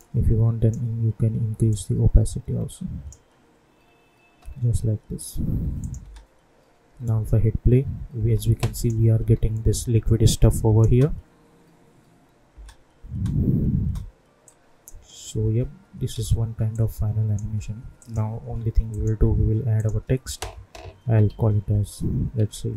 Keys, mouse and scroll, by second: 3.8-4.5 scroll up 1, 5.7 click, 6.0 space, 8.1 space, 8.7 click, 9.1 u, 10.3 click, 10.8 space, 14.4-16.0 drag, 16.0 ctrl+a, 16.7 click, 20.9 shift+l, 21.2 shift+i, 22.3 shift+q.